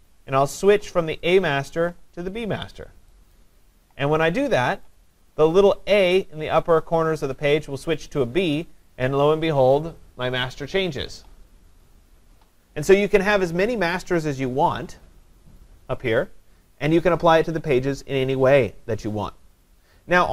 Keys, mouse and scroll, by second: 1.4 click, 3.3 click, 4.9 click.